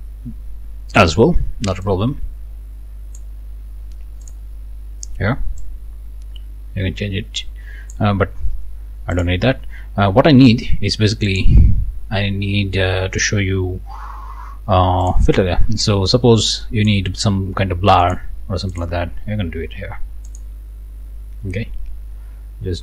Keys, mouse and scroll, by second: 1.8-3.4 drag, 4.2 click, 5.6-8.1 drag, 9.1 click, 11.3 click, 15.0 click, 16.5 click, 18.0 click, 18.7 click, 20.3 click.